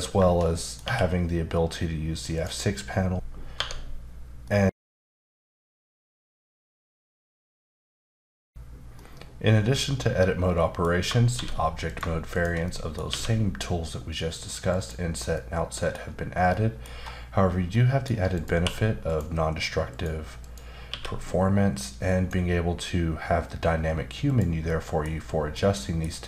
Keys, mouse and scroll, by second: 0.6 middle click, 0.8 q, 2.4 click, 3.3 F9, 4.2 middle click, 11.3 shift+d, 11.9 click, 12.3 shift+click, 12.7 middle click, 13.1 q, 14.7 click, 15.3 middle click, 16.1-16.5 scroll up 1, 16.9 scroll up 1, 17.7 middle click, 18.3 click, 18.6 q, 19.1 click, 19.9 click, 20.4 click, 20.9 q, 21.7 click, 24.2 click, 24.7 middle click, 25.5 middle click.